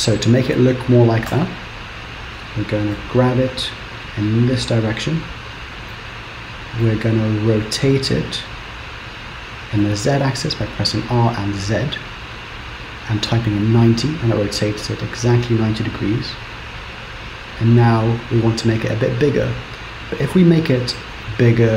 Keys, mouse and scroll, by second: 1.4 KP_7, 2.6-3.1 scroll down 3, 3.1 g, 6.0 middle click, 9.0 r, 14.9-17.9 scroll up 3, 20.4 s.